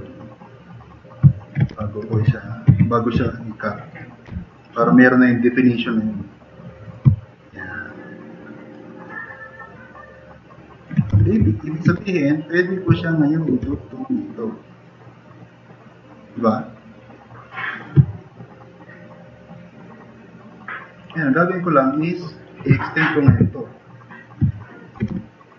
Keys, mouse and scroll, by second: 0.9 click, 1.2 drag, 1.4-4.3 typing, 3.7 click, 3.9 click, 6.9 e, 7.2-8.2 drag, 8.4 drag, 9.9-10.8 drag, 11.1 4, 11.4 drag, 12.0 e, 12.4 click, 12.9 click, 13.6 r, 14.8-17.8 drag, 23.3 3, 24.7 drag, 25.1 e.